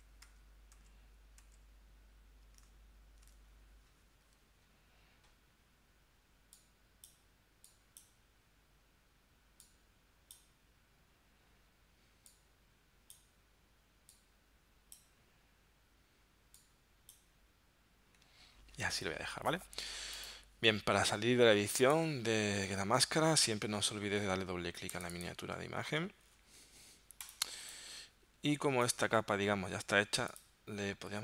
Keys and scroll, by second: 1.4 super+z, 27.5 space.